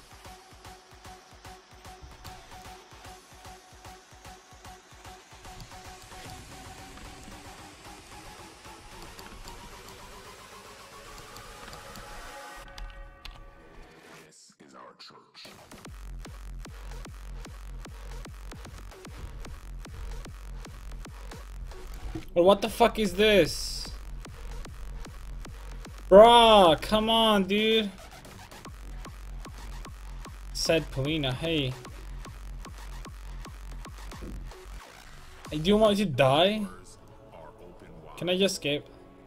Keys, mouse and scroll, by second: 1.5 click, 2.3 middle click, 2.7 click, 5.7 middle click, 7.3-9.8 drag, 9.1-10.1 middle drag, 10.6-12.7 drag, 10.6-12.7 middle drag, 10.6 right click, 12.7 KP_5, 12.8 KP_1, 13.3 middle click, 13.3 KP_3, 14.3-16.2 drag.